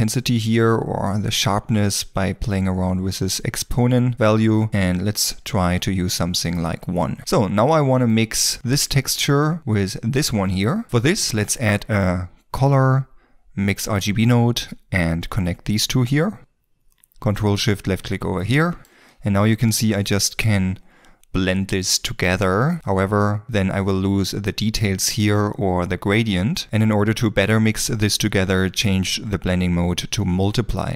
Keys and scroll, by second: 4.7 Return, 8.7 ctrl+s, 11.5 shift+a.